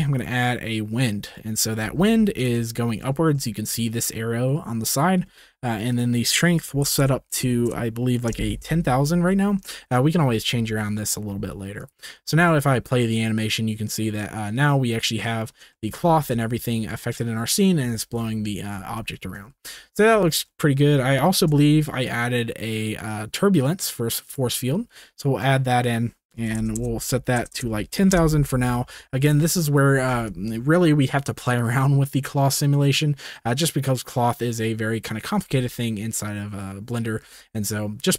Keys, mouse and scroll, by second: 1.8 g, 1.9 z, 2.9 shift+middle click, 3.4 shift+middle drag, 5.9-7.0 drag, 7.0 KP_0, 9.2 ctrl+s, 9.7 shift+click, 10.7 ctrl+s, 11.8 click, 12.1 space, 16.1 z, 17.8 space, 19.6 ctrl+s, 20.3 shift+middle click, 21.3 shift+a, 26.0-27.5 drag, 26.7 KP_0, 27.5 KP_0, 30.1 space, 37.2 space.